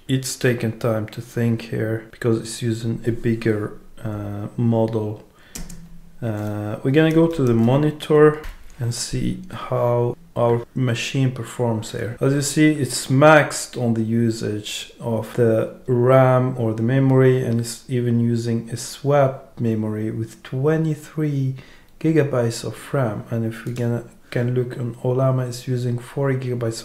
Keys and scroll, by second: 5.5 super+space.